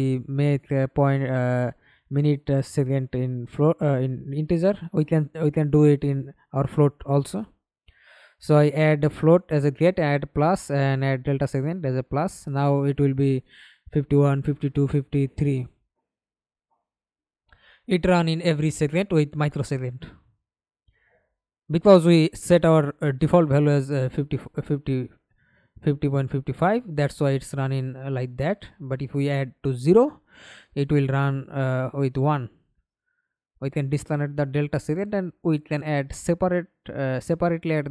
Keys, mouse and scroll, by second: 0.2 alt+click, 2.8 Return, 10.1 middle click, 11.0 F11, 11.6 alt+p, 22.6 Escape, 23.0 middle click, 23.7 F11, 28.2 KP_0, 28.5 Return, 30.1 alt+click, 31.4-34.6 typing, 36.3 l.